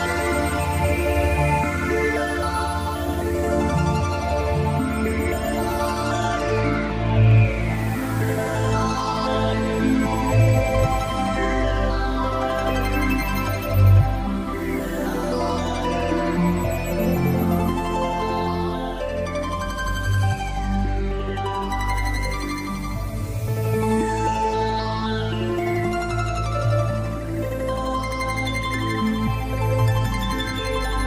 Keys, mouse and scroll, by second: 5.4 s, 9.6 click, 9.8 t, 11.8 click, 17.5 Delete, 19.0 click, 24.0 click, 28.3 click.